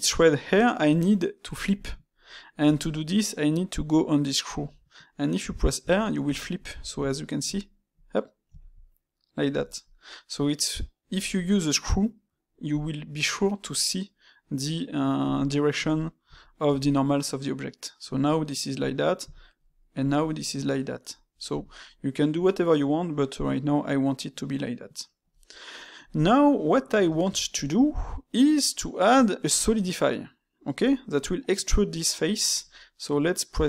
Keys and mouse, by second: 5.0-12.8 middle drag, 13.2-17.1 middle drag, 17.5-25.3 middle drag, 26.5-31.1 middle drag.